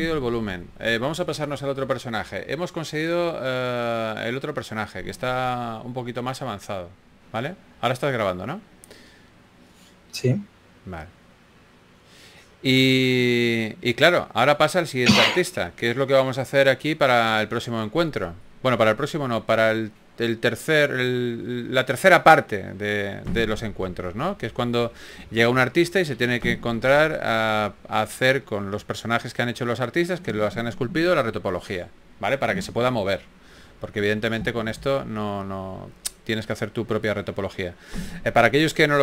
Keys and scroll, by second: 21.1 super+d, 28.3-31.1 typing, 34.8 shift+f.